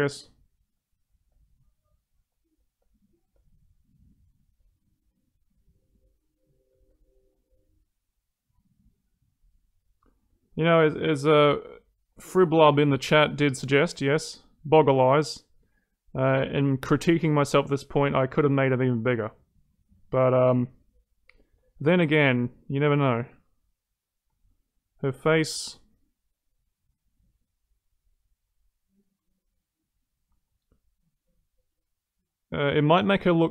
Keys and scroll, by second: 29.1 ctrl+z.